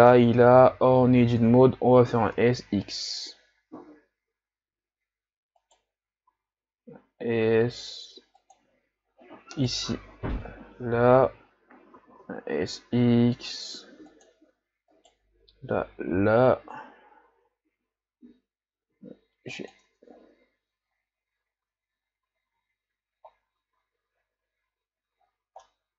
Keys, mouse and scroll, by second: 0.3 Tab, 2.2 s, 6.4 s, 9.7 right click, 11.0 l, 12.1 s, 15.0 right click, 15.8 l, 17.5 g, 20.1 Tab, 21.2-21.9 scroll down 3, 22.6 a, 23.3-24.3 scroll up 3, 24.3 scroll down 2, 25.4 scroll down 3, 25.8-25.9 middle drag.